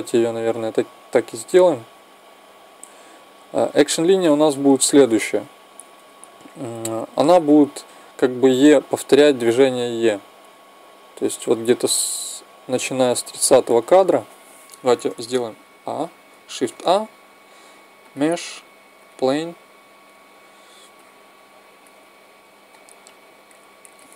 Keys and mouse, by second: 15.5 a, 16.4 shift+a, 22.5 click, 24.0 click.